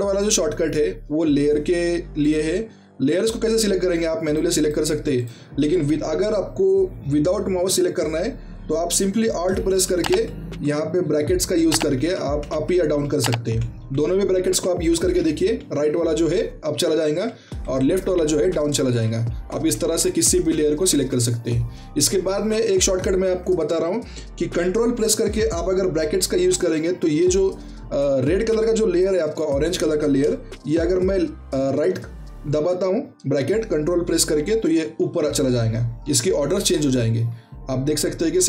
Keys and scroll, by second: 9.8 alt+[, 11.7 alt+[, 11.9-15.5 typing, 17.0 alt+[, 17.8 typing, 18.8 alt+[, 19.2-20.9 typing, 31.7 ctrl+], 34.7-38.4 typing.